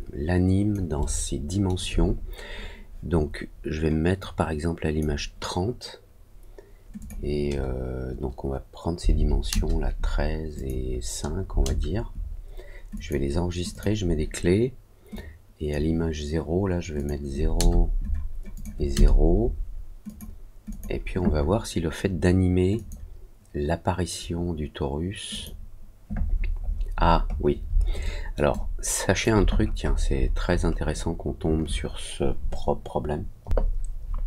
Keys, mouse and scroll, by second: 0.9 alt+middle click, 4.1 click, 6.9 click, 10.5 click, 12.9 click, 13.6 click, 15.1 click, 16.9 click, 18.5 click, 20.0 click, 20.6 click, 22.7 click, 25.2 click, 26.2-26.7 scroll down 2, 26.7 scroll up 1, 27.2 scroll up 1, 28.0 alt+middle click, 28.4 alt+click, 29.4-30.2 scroll down 3, 30.2 scroll up 1, 30.3-30.7 scroll down 2.